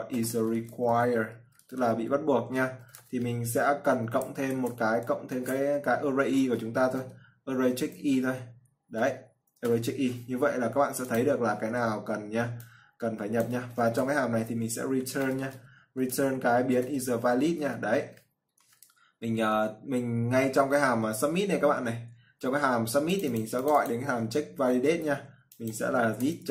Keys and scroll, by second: 25.0 ctrl+c.